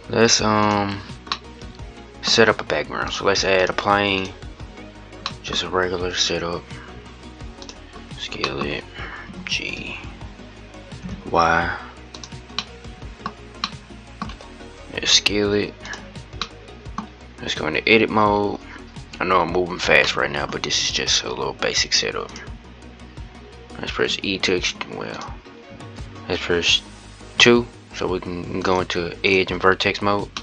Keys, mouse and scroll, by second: 0.3 scroll up 1, 0.4 click, 1.1-2.0 middle drag, 2.0-2.8 scroll up 2, 2.8-4.0 scroll up 1, 4.0 click, 4.5-4.9 scroll down 1, 4.9-5.3 middle drag, 5.3-6.6 scroll up 2, 6.6 s, 7.6-8.1 scroll down 1, 8.1-9.0 middle drag, 9.0 g, 12.3-13.1 middle drag, 13.1 scroll up 1, 13.4-14.7 middle drag, 14.7 s, 16.1 middle click, 16.8-17.6 scroll down 3, 17.6 Tab, 19.8 shift+middle click, 20.3-21.6 scroll up 3, 21.6-22.1 scroll up 1, 22.1 click, 23.7 e, 25.8 ctrl+z, 27.3 2, 28.4 click, 29.1 click, 29.7-30.1 scroll down 1, 30.1-30.4 middle drag.